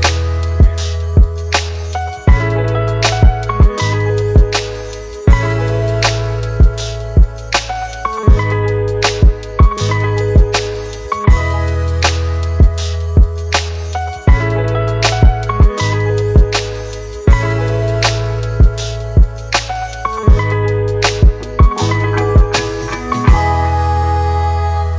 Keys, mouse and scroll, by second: 6.3 double click, 19.0-20.8 typing, 22.4 double click.